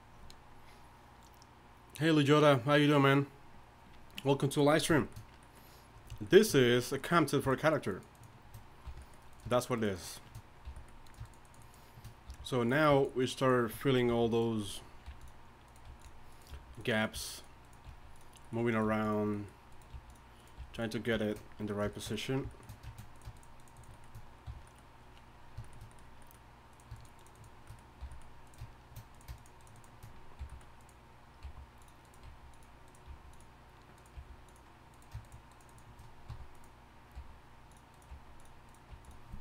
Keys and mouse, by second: 7.4 right click, 8.8 f, 10.6 f, 11.0-12.1 drag, 12.3 f, 12.6-14.1 drag, 14.1-18.8 typing, 19.9 g, 20.6 g, 23.6 shift+right click, 24.4 f, 26.7 click, 27.2 shift+right click, 27.9-29.6 drag, 28.0 f, 29.6 shift+right click, 30.4 f, 31.4 g, 32.2 g, 33.1 g, 34.1 g, 36.3 f, 37.1 g, 38.1 g, 38.9 g.